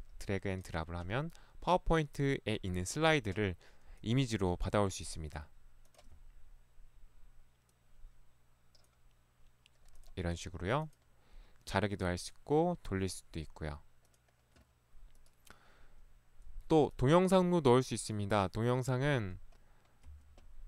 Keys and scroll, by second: 20.0 Escape.